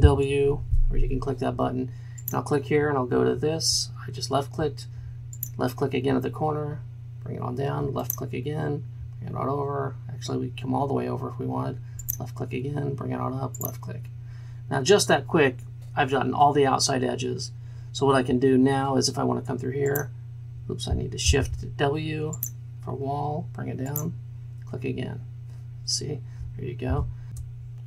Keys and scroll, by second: 0.5 shift+w, 21.3 shift+w, 26.9 shift+w, 27.3 ctrl+space.